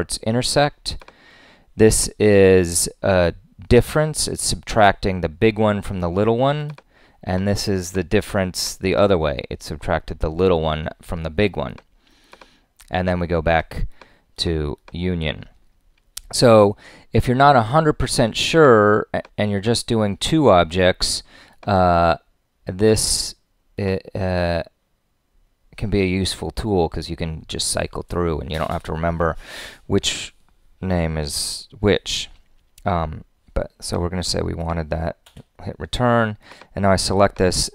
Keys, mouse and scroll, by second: 17.5 click, 35.2 Return.